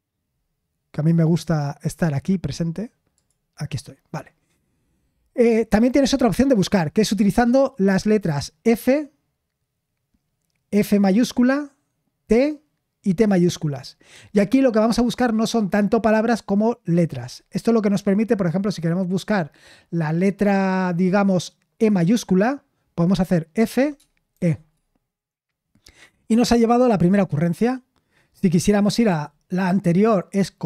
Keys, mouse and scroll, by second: 1.8 click, 3.1-23.5 drag, 23.5-24.3 typing.